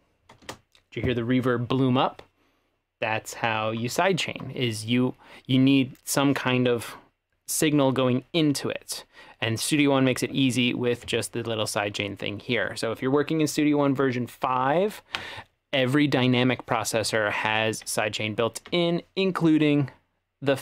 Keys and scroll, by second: 0.5 space.